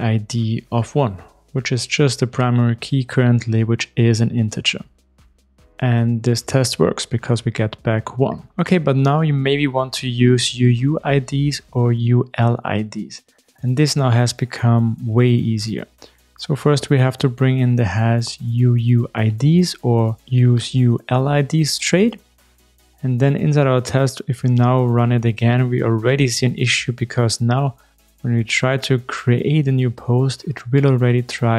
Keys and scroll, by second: 1.8 ctrl+shift+r, 6.3 shift+super+F12, 15.9 super+b, 21.8 super+/, 21.9 super+e, 23.8 ctrl+shift+r.